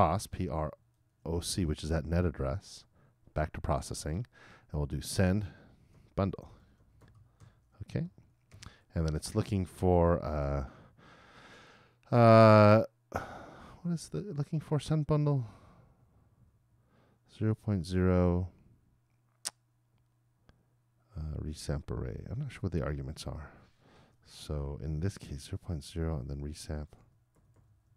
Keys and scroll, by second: 0.2 shift+p, 6.1-8.5 typing.